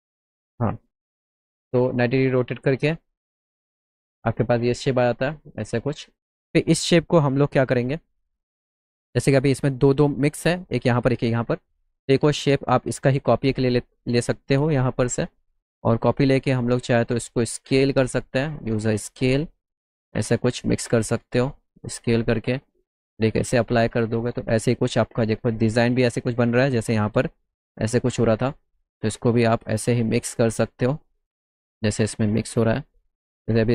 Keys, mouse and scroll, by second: 0.9 click, 2.9 click, 3.8 middle click, 4.7 alt+middle click, 5.6 middle click, 5.8-6.5 scroll down 4, 7.4-8.0 scroll down 2, 9.2 middle click, 9.7 middle click, 10.4 middle click, 11.9 middle click, 13.0-14.6 shift+drag, 15.9 click, 17.2 click, 18.5-20.2 drag, 21.6 click, 22.6-24.3 drag, 25.7 alt+middle click, 28.3 click, 32.8 click.